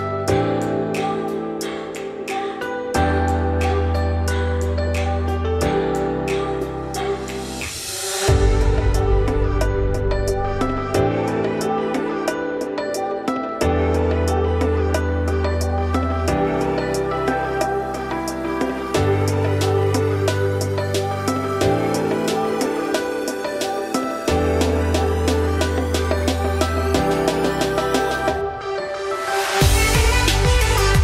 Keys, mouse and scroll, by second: 1.1 middle click, 1.6-1.9 scroll up 3, 1.9 g, 3.0-3.4 scroll up 2, 3.4 e, 5.4 click, 5.6 3, 5.8 click, 6.0 middle click, 6.5 z, 7.2 z, 8.2 scroll down 1, 8.3 middle click, 8.6 g, 10.4-12.6 typing, 10.8 shift+middle click, 11.1-11.7 scroll up 4, 12.0 click, 13.9 z, 14.3 click, 14.6 z, 14.9 scroll down 2, 15.1 s, 17.4-17.9 scroll up 2, 17.9 g, 19.2 scroll down 2, 19.5 scroll up 2, 19.7 z, 20.1 click, 20.4 z, 21.7 g, 22.5 scroll down 5, 22.7 middle click, 23.0 Tab, 23.4-24.2 shift+middle drag, 24.2 click, 25.0-28.5 drag, 28.5 scroll down 1, 28.8-29.9 shift+middle drag, 29.9-31.0 drag.